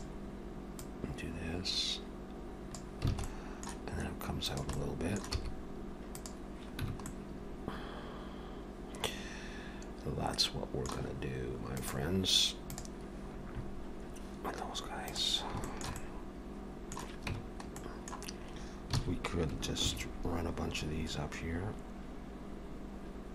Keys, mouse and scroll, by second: 0.8 click, 3.1 alt+a, 3.3 middle click, 4.4 click, 4.8 middle click, 5.4 e, 6.9 Tab, 7.1 middle click, 15.7 shift+middle click, 16.0 middle click, 17.3 Tab, 17.8 middle click, 19.0 alt+a, 19.8 ctrl+r.